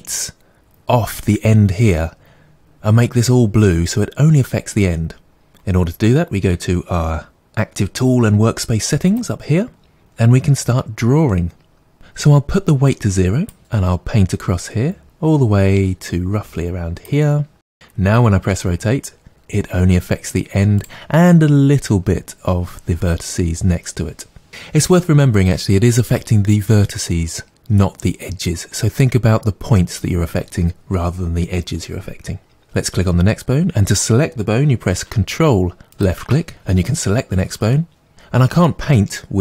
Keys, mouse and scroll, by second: 9.1 click, 12.6-20.8 drag, 18.5 r, 32.6 ctrl+z, 32.6 click.